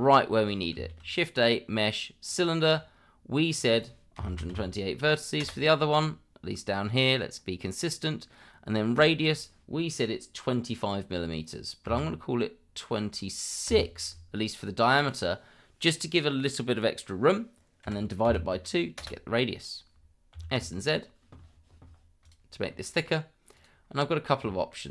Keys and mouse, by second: 1.0 shift+a, 3.6-5.4 drag, 8.9-19.0 drag, 20.3 s, 20.5 z, 23.5 click, 24.5 shift+middle drag.